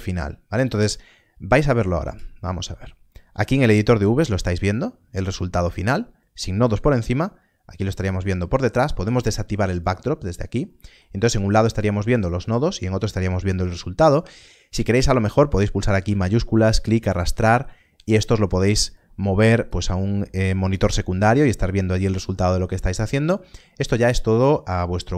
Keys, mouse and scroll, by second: 2.0 ctrl+space, 3.1-3.8 scroll down 1, 7.6-11.4 scroll down 1, 11.4 middle click, 12.5-14.5 scroll down 1, 16.0 scroll down 1, 16.3 shift+click, 17.9 click.